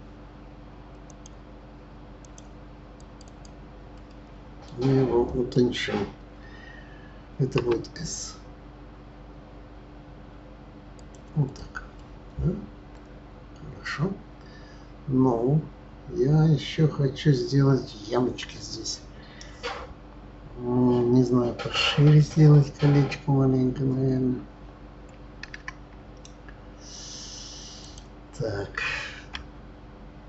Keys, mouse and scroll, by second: 1.0 click, 2.2 click, 3.0 click, 3.2 click, 3.9-7.0 middle drag, 7.6 s, 11.4 click, 12.0-15.0 middle drag, 27.8 click, 29.3 Tab.